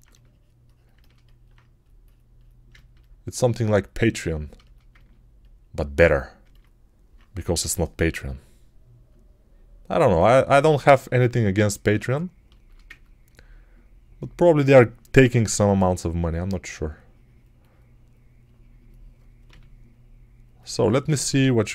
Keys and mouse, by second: 7.4 g, 12.7 ctrl+alt+right click, 15.1 3, 19.3 g.